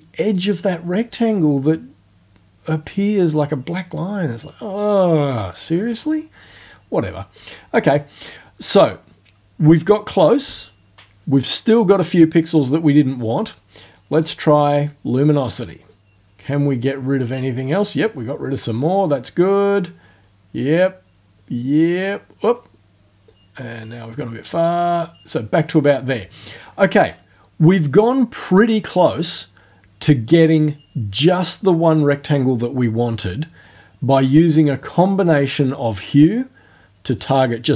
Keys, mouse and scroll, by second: 7.4 click, 14.2 click, 15.9-22.7 drag, 23.3-25.9 drag, 34.8 click.